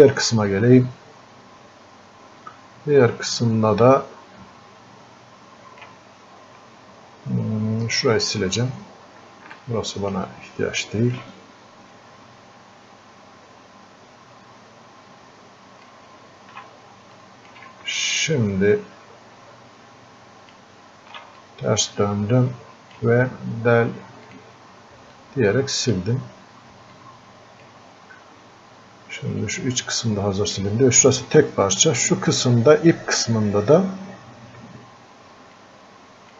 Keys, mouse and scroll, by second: 0.5-8.9 drag, 8.9-9.4 scroll up 1, 9.6-11.2 alt+drag, 11.2-17.2 ctrl+alt+shift+drag, 17.2 click, 18.1-21.4 ctrl+alt+shift+drag, 21.4-24.3 drag, 24.3-27.0 drag, 27.0-29.5 drag, 29.5-32.9 drag, 35.6-36.3 drag.